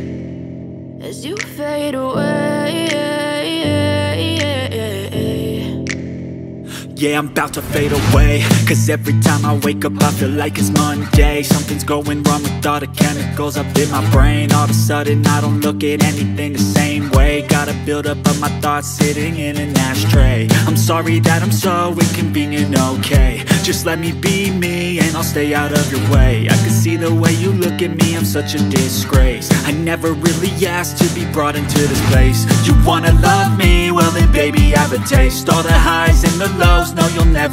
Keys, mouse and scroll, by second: 2.0 click, 8.2 alt+scroll up 1, 9.1 alt+scroll down 1, 9.7 alt+scroll up 1, 10.2 space, 10.4 click, 10.6 space, 12.0 click, 14.7 click, 21.9 click, 24.9 click, 31.2 click.